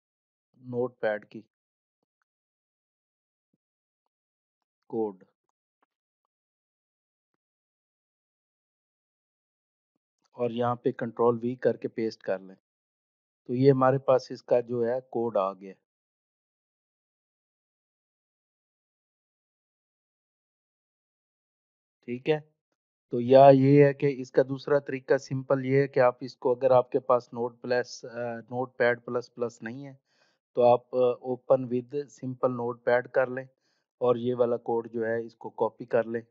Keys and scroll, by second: 10.9 ctrl+v, 35.1 ctrl+a.